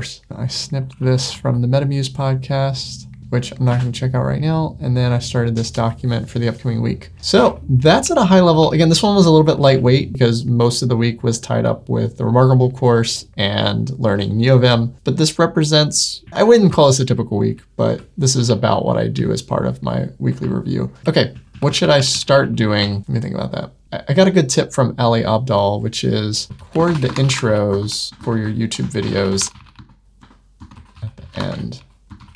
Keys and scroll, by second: 0.3 Escape, 3.6 super+w, 7.3 super+1, 23.0 Escape.